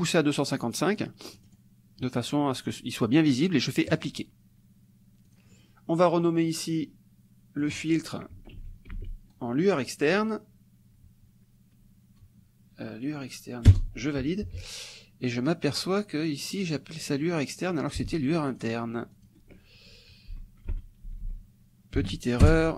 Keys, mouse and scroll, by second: 1.4 click, 3.9 click, 5.3 click, 7.6 click, 8.9 ctrl+v, 13.7 Return, 15.8 click, 16.7-18.1 drag, 18.5 click, 19.3 click, 20.3 Left, 21.1 Delete, 22.0 n, 22.5 Return.